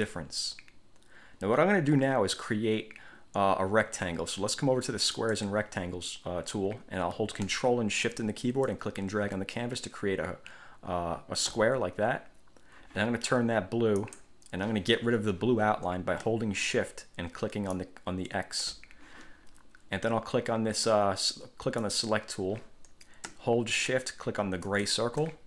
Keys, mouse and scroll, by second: 5.3 click, 8.9-11.9 ctrl+shift+drag, 14.2 click, 17.9 shift+click, 22.0 click, 24.8 shift+click.